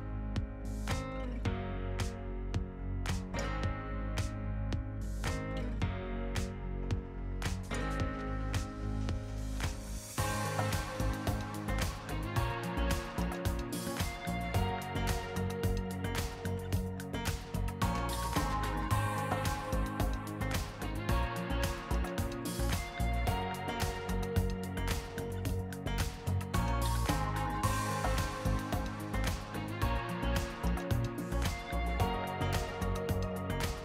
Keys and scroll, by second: 1.3 t, 3.7 ctrl+x, 4.3 t, 5.8 s, 7.4 ctrl+v, 8.7 ctrl+v, 9.2 r, 13.5 BackSpace, 14.1 r, 19.4 ctrl+x, 20.3 Return, 20.7 t, 25.5 ctrl+v, 26.5 r, 29.7 r, 31.7 Right, 32.2 t, 32.9 r.